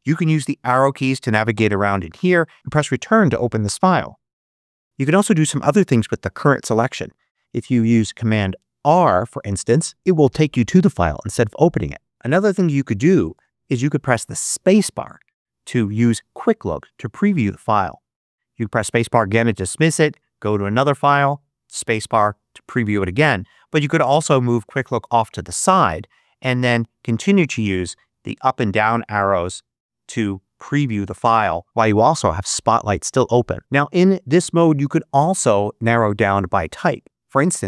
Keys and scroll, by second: 0.5 Down, 1.4 Up, 3.5 Return, 8.7 super+r, 12.0 Down, 12.7 Up, 14.6 space, 18.5 space, 20.3 Down, 20.9 space, 28.0 Down.